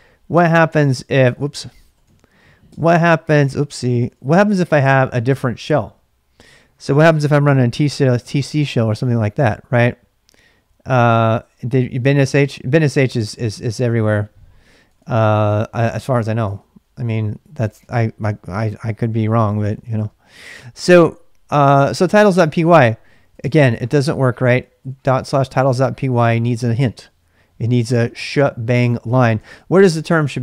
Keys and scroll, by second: 1.0-5.0 typing, 2.6 Return, 14.6-20.3 typing, 21.8-26.1 typing, 24.4 ctrl+c, 26.1 Tab, 26.7 Return, 29.3-30.4 typing.